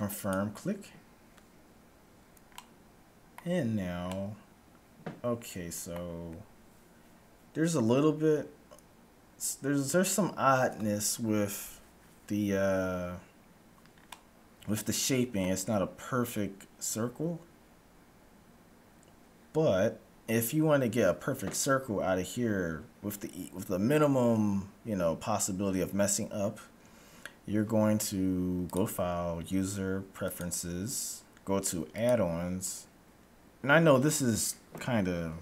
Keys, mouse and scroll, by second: 1.7-6.1 middle drag, 9.4-10.7 scroll up 1, 10.7-11.2 scroll up 1, 14.2-16.1 middle drag, 28.6-30.4 drag.